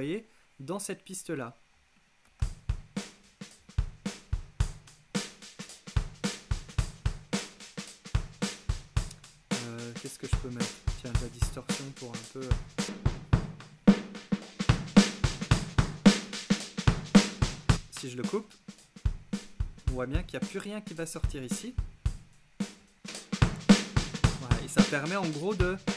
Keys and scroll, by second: 2.3 space.